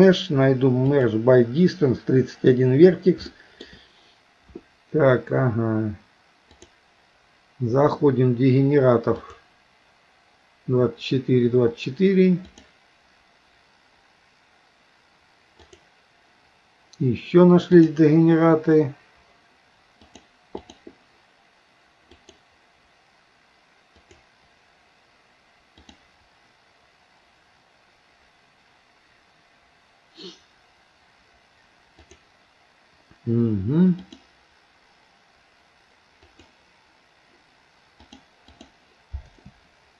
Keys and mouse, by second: 3.3 shift+middle click, 6.6-9.4 drag, 12.5-15.9 drag, 17.8-20.1 drag, 20.6-24.2 drag, 25.8-32.2 drag, 34.0-36.5 drag, 38.0 click.